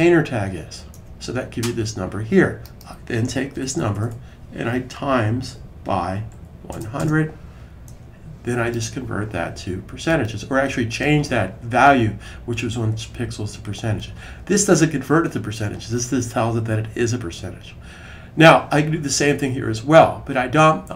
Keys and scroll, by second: 3.4 Right, 3.5 Right, 3.7 Right, 3.8 Right, 5.3-6.7 typing, 9.7-10.4 typing.